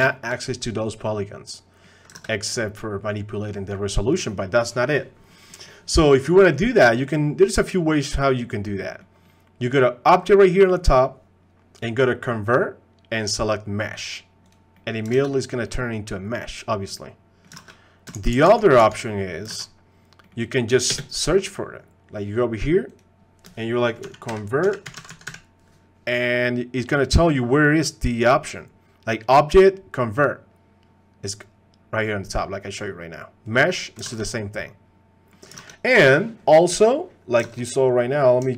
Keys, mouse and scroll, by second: 0.1 shift+click, 1.1 click, 2.2 ctrl+Tab, 5.5 click, 7.0 middle click, 7.5 middle click, 8.1-8.5 middle drag, 8.9 middle click, 10.3-14.5 drag, 14.7 middle click, 15.2 ctrl+Tab, 15.7-17.4 middle drag, 17.7 ctrl+Tab, 18.3 ctrl+z, 18.8 ctrl+z, 19.6 ctrl+Tab, 20.5 click, 20.9 space, 34.3 ctrl+Tab, 34.3-35.3 drag, 35.7 ctrl+Tab, 37.5 ctrl+Tab, 38.0 click.